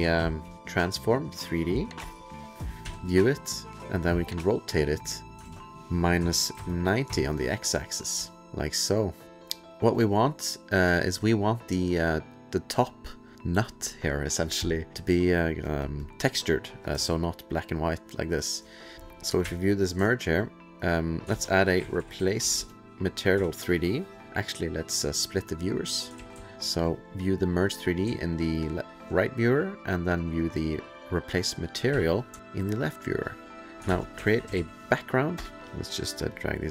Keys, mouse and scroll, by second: 0.0-0.6 typing, 2.0 Return, 2.8 2, 3.8 click, 4.9 click, 5.2 click, 5.4 ctrl+a, 6.2 KP_Subtract, 6.5 KP_9, 7.1 KP_Enter, 7.1 KP_0, 8.2-8.9 alt+scroll, 9.2 click, 10.0 alt+click, 15.7 click, 15.8 click, 15.9 click, 17.1-18.1 alt+scroll, 18.9 click, 18.9 BackSpace, 19.2 click, 19.4 2, 20.1 alt+scroll, 20.8 click, 21.0 click, 21.6-23.0 typing, 23.3 Return, 25.1 click, 25.9 click, 26.2 ctrl+f, 26.5 alt+scroll, 26.6 alt+middle click, 27.1 click, 28.2 alt+middle click, 28.6 alt+scroll, 30.2 click, 31.1 click, 31.9 alt+1, 32.4-33.2 alt+scroll, 33.7 click, 33.9-35.0 typing, 35.4 Return, 35.6 click, 36.3 click.